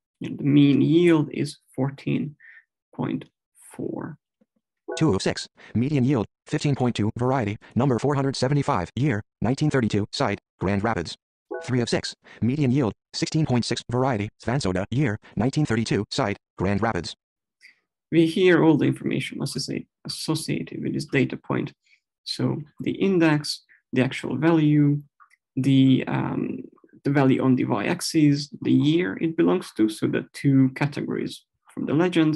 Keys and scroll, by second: 4.5 Right.